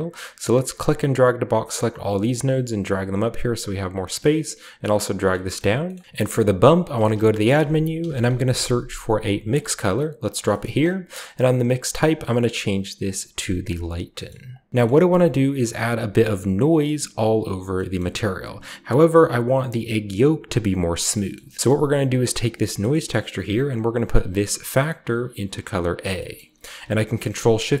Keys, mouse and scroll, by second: 0.5-1.6 drag, 2.2 click, 4.9 click, 5.2 middle click, 5.5-6.9 scroll up 3, 6.9 shift+scroll up 1, 6.9 shift+middle click, 6.9 typing, 7.4 click, 7.9-8.5 typing, 9.4 click, 10.2 click, 10.6-11.6 scroll up 1, 11.6 scroll up 1, 13.6 click, 14.0-14.4 scroll down 1, 14.4 click, 15.5 click, 16.0 scroll up 1, 17.9-20.5 middle drag, 18.5-20.5 scroll up 1, 20.9-22.0 scroll down 1, 21.1 middle click, 21.3 middle click, 21.6-22.1 middle drag, 22.0 click, 24.6-25.9 drag, 26.3-27.3 scroll up 3, 27.3-27.8 ctrl+shift+scroll up 1, 27.5 ctrl+shift+click.